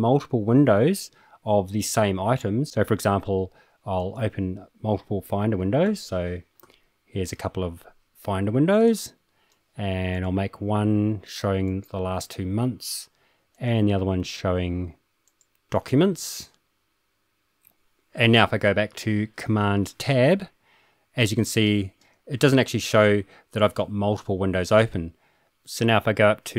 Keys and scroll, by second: 5.8 super+n, 6.6 super+n, 19.9 super+Tab, 21.2 super+Tab, 21.4 super+Tab.